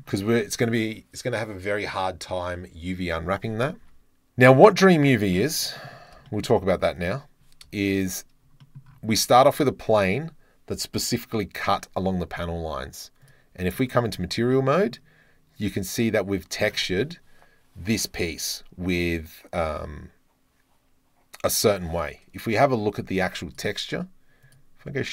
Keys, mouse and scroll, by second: 0.1 Tab, 3.9 Tab, 5.8-6.5 middle drag, 7.0 click, 7.9 KP_Decimal, 8.6 drag, 9.1 Tab, 13.4 click, 14.2 Tab, 14.6-14.9 drag, 23.5 click.